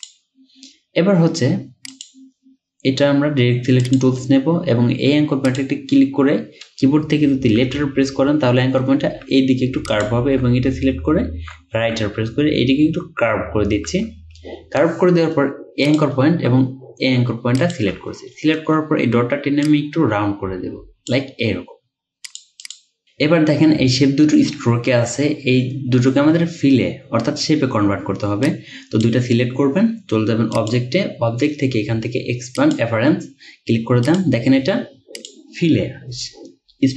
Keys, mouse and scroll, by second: 7.7 click, 10.5 right click, 11.8 right click, 13.9 right click, 17.6 shift+click, 18.3-21.6 alt+scroll up 2, 22.7 double click.